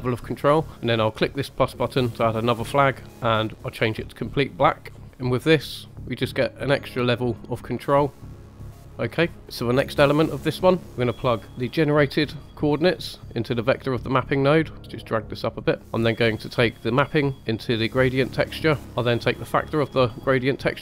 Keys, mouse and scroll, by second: 1.1 click, 2.4-3.2 drag, 5.0 scroll up 2, 5.6-7.5 drag, 8.1-8.9 drag, 9.4-10.7 middle drag, 9.4 scroll down 3, 12.4-13.4 drag, 14.8 click, 15.8 scroll up 1, 16.8 click, 17.6 click, 18.8 ctrl+right click, 19.7-20.8 drag.